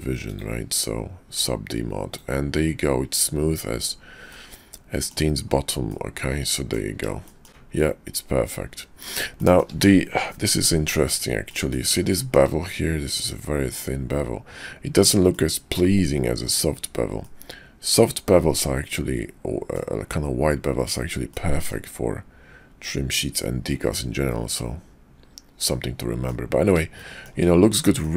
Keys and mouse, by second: 4.3-5.1 drag, 5.9-6.7 drag, 7.3 shift+drag, 9.4 shift+drag, 11.4 click, 12.1 shift+drag, 15.2 click, 17.2-19.8 drag, 21.3-21.7 shift+middle drag, 23.8-26.3 middle drag, 27.0 shift+middle drag, 28.0-28.1 shift+drag.